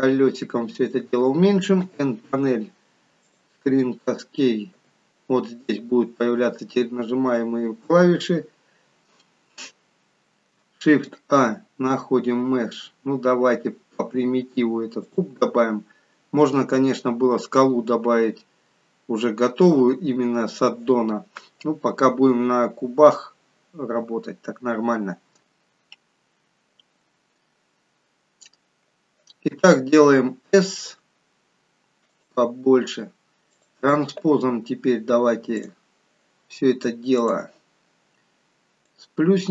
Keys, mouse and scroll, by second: 10.8 shift+a, 38.7 click.